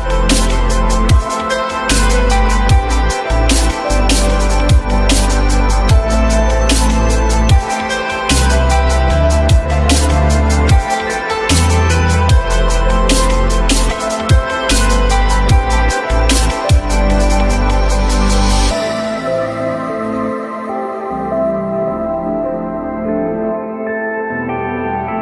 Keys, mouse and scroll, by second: 0.0 alt+middle click, 4.6 alt+middle click, 7.3 alt+middle click, 8.0 alt+middle click, 11.4 alt+middle click, 17.6 alt+middle click, 22.5 alt+middle click, 23.2 alt+middle click, 23.3 alt+middle click.